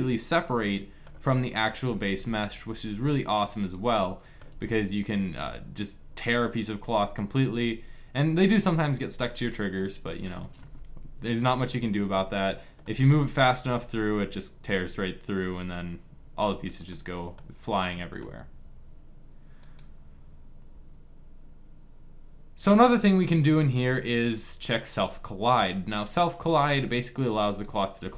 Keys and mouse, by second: 1.9 g, 3.4 middle click, 4.2 g, 9.5-11.5 middle drag, 13.2 g, 16.6 middle click, 19.3-21.3 right drag, 25.8 click, 27.7 g.